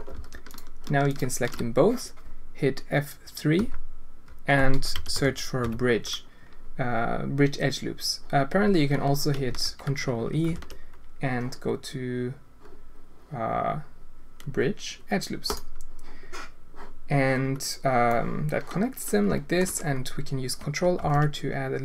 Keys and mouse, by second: 0.1 alt+a, 3.6 F3, 10.4 ctrl+e, 18.1-19.6 drag, 21.0 ctrl+r.